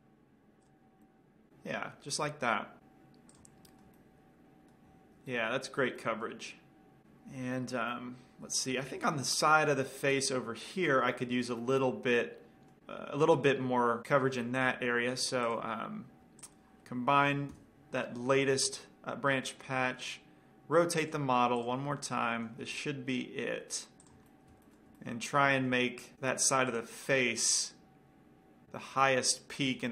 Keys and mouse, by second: 3.7-5.2 drag, 4.3-7.0 middle drag, 8.0-14.1 middle drag, 14.6-15.8 middle drag, 15.8-18.5 drag, 15.8-16.5 right drag, 18.1 ctrl+j, 21.5-23.8 drag, 23.0 r, 24.5-26.2 drag, 26.5 r, 27.4-28.7 drag, 27.4-28.7 middle drag, 29.1-29.7 middle drag.